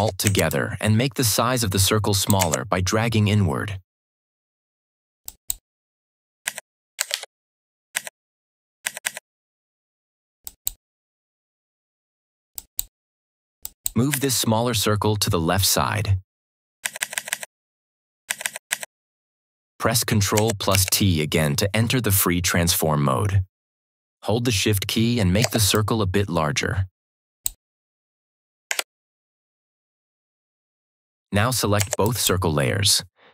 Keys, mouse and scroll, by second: 0.4-2.3 alt+shift+drag, 5.1 click, 6.4 Left, 7.0 ctrl+=, 7.9 Left, 10.3 click, 14.0 Left, 20.6 ctrl+t, 25.6-27.5 shift+drag, 28.6 Return, 31.7 ctrl+Return, 31.9 ctrl+click.